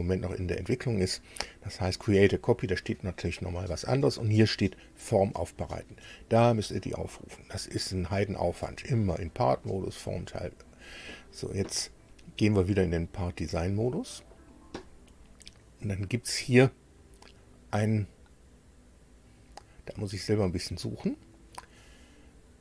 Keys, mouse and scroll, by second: 11.0 click, 12.9 click, 13.9 click, 15.6 click.